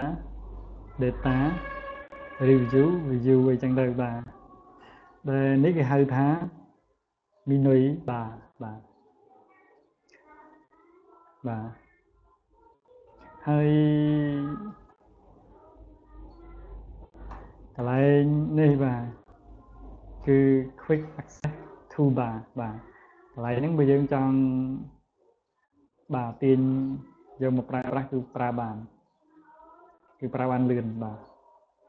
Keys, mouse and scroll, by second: 0.6 click, 2.0 click, 3.0 click, 4.4 click, 5.1 click, 5.7 click, 6.3 click, 7.1 click, 7.9 click, 8.3 click, 8.8 click, 10.1 click, 12.6 click, 14.2 scroll down 1, 16.8 click, 23.6 click, 31.4 click.